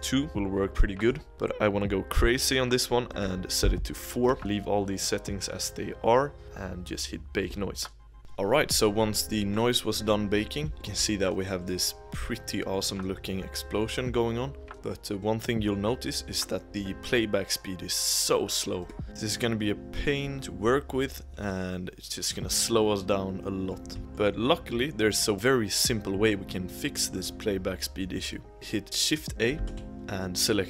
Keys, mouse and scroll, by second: 0.8-3.1 shift+middle drag, 3.1-4.3 drag, 7.6 click, 8.1-8.5 middle drag, 8.5 scroll up 1, 8.7-11.3 middle drag, 11.3-11.9 scroll up 1, 11.9-13.2 middle drag, 13.2 scroll up 1, 13.4-14.8 middle drag, 14.8-15.4 scroll up 1, 15.4-18.4 middle drag, 19.8-22.7 drag, 23.0-24.7 middle drag, 24.7 scroll up 1, 24.9 middle click, 25.3-25.6 scroll down 3, 28.5 shift+a, 28.9 click, 29.8 shift+a.